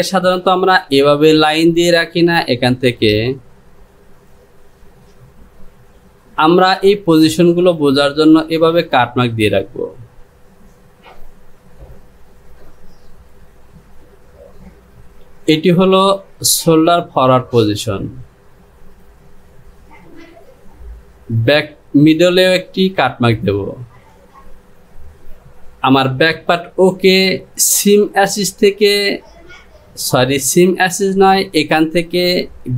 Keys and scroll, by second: 0.8 Delete.